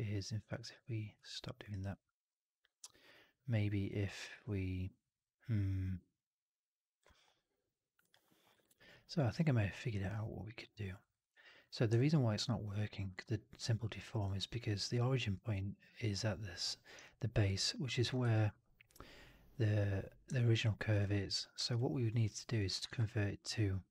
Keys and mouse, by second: 1.2 alt+click, 1.4 alt+middle click, 1.6 alt+right click, 1.8-6.9 alt+drag, 8.9 alt+middle click, 9.1 alt+middle click, 9.5 alt+middle click, 9.8 alt+right drag, 10.0-10.8 alt+drag, 10.9 alt+right drag, 11.1-11.4 alt+drag, 11.8-13.0 alt+drag, 14.1-14.7 alt+drag, 16.9-18.0 alt+drag, 18.1 1, 20.2 click, 21.2 4, 21.5 right drag, 21.6-22.4 drag, 22.7 shift+Tab.